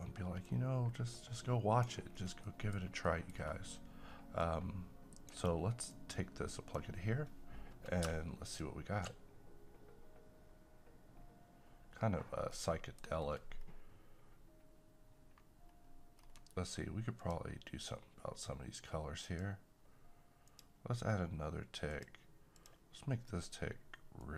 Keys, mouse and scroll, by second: 2.1 scroll down 1, 2.4 middle click, 2.8 scroll up 1, 3.1 middle click, 3.3-4.4 scroll down 1, 4.4-8.4 drag, 12.5 middle click, 13.6 scroll up 1, 15.7-16.3 scroll up 1, 17.2-24.3 drag.